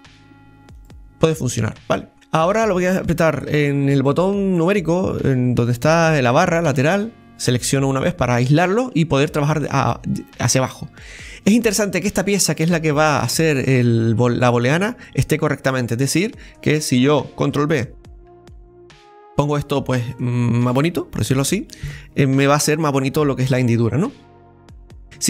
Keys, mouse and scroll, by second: 6.6 KP_Divide, 8.4-14.8 middle drag, 14.8 right click, 15.8 alt+shift+right click, 16.0 alt+shift+right click, 16.4-17.5 middle drag, 17.5 ctrl+b, 19.1 click, 19.5 middle click, 20.4-21.0 scroll up 1, 21.0-24.0 middle drag, 24.7-25.0 scroll up 2, 25.0 middle click, 25.1 KP_1.